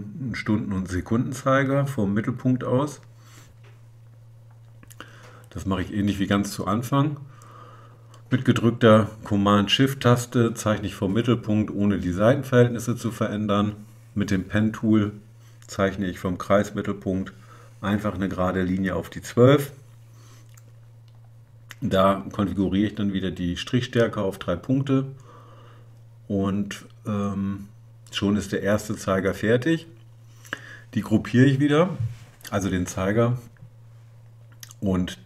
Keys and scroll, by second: 13.9 p.